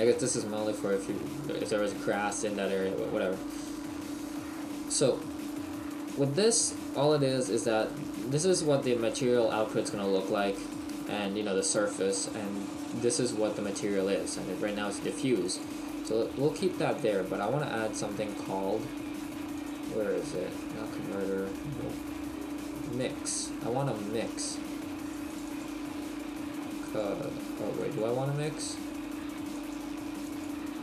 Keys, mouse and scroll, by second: 17.3 click, 17.3 shift+middle click, 17.3-17.6 scroll down 3, 24.6 click.